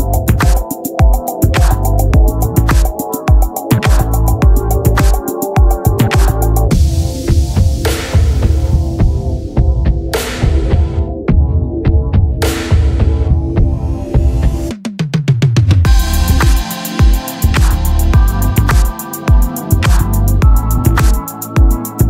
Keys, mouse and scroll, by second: 1.1-2.3 right drag, 2.3-4.6 drag, 6.6-8.3 drag, 9.8-11.9 right drag, 11.9-15.1 drag, 16.6 middle click, 17.1 shift+q, 20.7 t, 21.4 click.